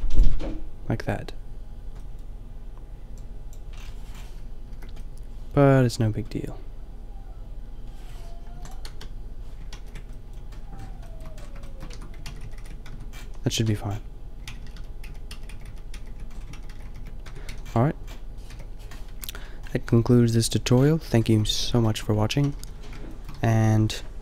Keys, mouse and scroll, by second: 0.3 Tab, 3.0 click, 4.7 KP_4, 8.5 Delete, 8.9 KP_0, 9.8 ctrl+z, 11.9 Tab, 12.3 ctrl+z, 12.4 ctrl+z, 12.6 ctrl+z, 12.9 Tab, 13.2 a, 13.6 Tab, 14.5 ctrl+z, 14.6 ctrl+z, 14.8 ctrl+z, 15.1 ctrl+z, 15.4 ctrl+z, 15.5 ctrl+z, 15.7 ctrl+z, 16.0 ctrl+z, 16.7 ctrl+z, 16.8 ctrl+z, 17.3 Tab, 17.5 a, 18.5 KP_5, 19.1 a, 22.4 a, 22.6 a, 22.7 a, 23.3 a.